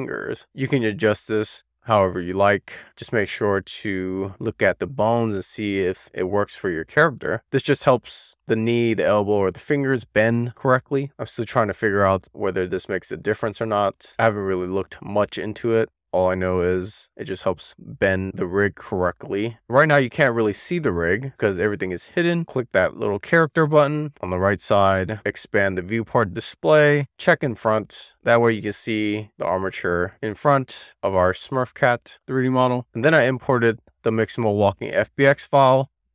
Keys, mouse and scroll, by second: 7.1-8.8 middle drag, 9.2-10.3 scroll up 1, 10.3-11.4 middle drag, 11.9-12.8 scroll up 1, 12.8-17.1 middle drag, 22.2 click, 22.7 click, 25.8 click, 27.2 click, 27.9-29.8 middle drag, 30.1-30.7 scroll down 1, 30.8 shift+middle click, 32.7-35.9 drag.